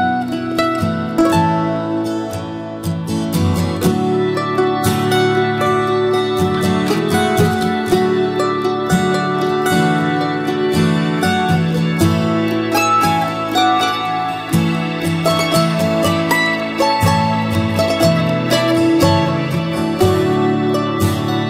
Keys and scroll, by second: 7.1 ctrl+a, 7.9 ctrl+c, 13.0 ctrl+v.